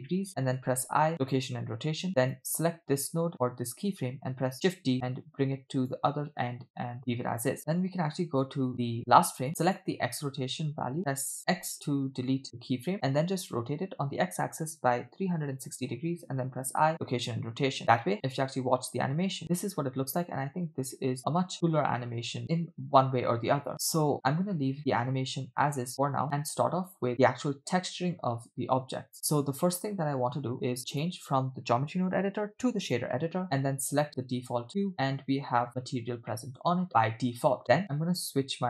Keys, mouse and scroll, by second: 0.6 i, 2.2 click, 4.5 shift+d, 7.5 space, 7.6-9.5 drag, 9.7 click, 11.4 x, 13.4 r, 16.3 i, 17.8 click, 18.1 space, 25.6 space, 25.9 space, 27.1 space, 28.3-29.8 drag, 30.9-33.1 drag, 33.9 click, 34.9-35.4 scroll down 4, 35.6 middle click, 35.9-37.0 scroll up 4, 36.3 middle click, 37.1 middle click, 37.6 middle click.